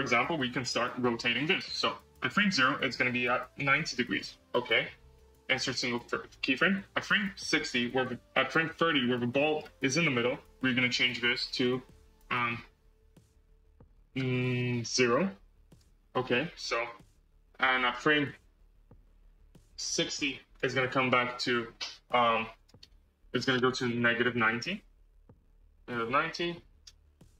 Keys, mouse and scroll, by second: 2.4-4.1 drag, 4.5-7.0 right drag, 7.4-10.7 drag, 10.9-13.4 drag, 16.5-18.5 right drag, 18.5-20.9 drag, 22.4-24.9 drag.